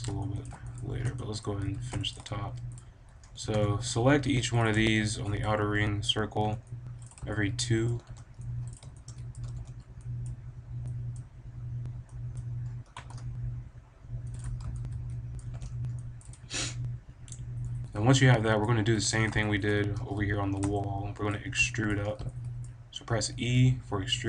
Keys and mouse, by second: 1.7 z, 3.3 b, 6.3 b, 6.6 drag, 7.0 click, 8.0 b, 9.4 b, 14.8 middle click, 14.9 middle click, 15.1 middle click, 15.4 b, 16.6-18.0 drag, 18.0 middle click, 19.9 middle click, 20.0 click, 20.7 middle click, 21.9-23.8 drag, 23.3 e.